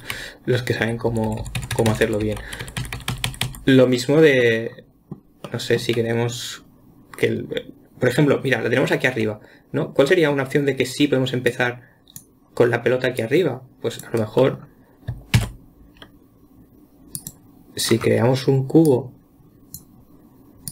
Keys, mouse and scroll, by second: 0.6-1.3 Left, 1.5-2.3 Right, 2.5 Right, 2.7 Right, 2.8 Left, 3.1 Left, 3.2 Left, 3.4 Left, 3.7-4.3 scroll down 11, 4.8-11.9 middle drag, 11.9 click, 13.6 click, 14.8-15.8 middle drag, 15.8 shift+a, 18.3-19.3 scroll up 2, 19.3 click.